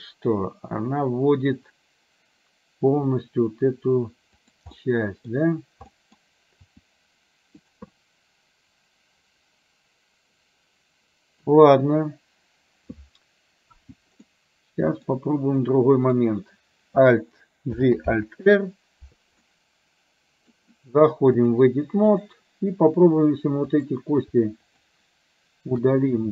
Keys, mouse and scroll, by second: 4.8 middle click, 5.9 middle click, 6.8 r, 8.0-11.5 middle drag, 14.4 middle click, 15.7 click, 17.9 alt+g, 18.2 alt+r, 19.5-20.6 middle drag, 21.6 click, 23.7 click, 24.6 shift+click.